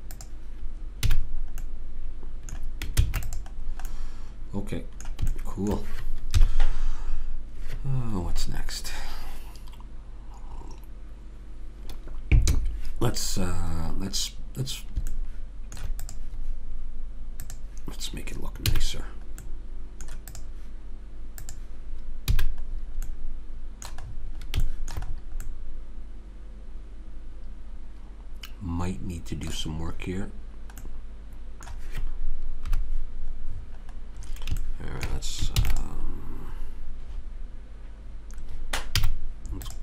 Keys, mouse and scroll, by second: 1.1 a, 3.0 ctrl+s, 6.4 KP_3, 15.1 middle click, 16.0-19.3 drag, 18.7 a, 19.5 middle click, 20.3-23.0 drag, 22.3 a, 23.0 right click, 23.1 middle click, 27.1 middle click, 30.4-32.7 middle drag, 32.7 KP_3, 33.7-34.9 middle drag, 35.6 ctrl+s, 39.0 z.